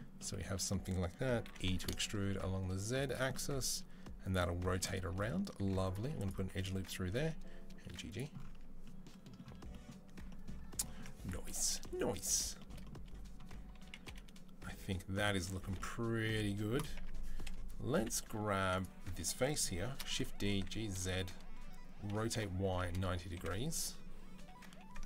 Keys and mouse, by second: 1.3 e, 5.4 ctrl+r, 6.2 1, 6.4 click, 6.8 g, 8.3 Tab, 8.3-24.2 middle drag, 13.6 KP_3, 13.9 KP_7, 16.8 Tab, 18.4 3, 19.7 shift+d, 20.3 g, 21.9 r, 23.2 KP_1, 24.2 h, 24.9 ctrl+middle click, 25.0 ctrl+z.